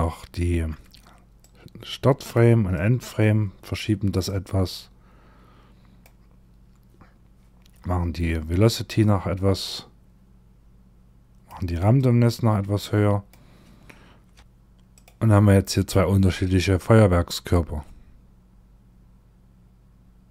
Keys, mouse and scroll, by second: 0.9 click, 2.2 click, 3.7 click, 7.2-8.0 scroll down 1, 8.0-9.0 scroll down 3, 9.0 click, 11.4 click, 13.9 a, 14.0 a, 14.4 click.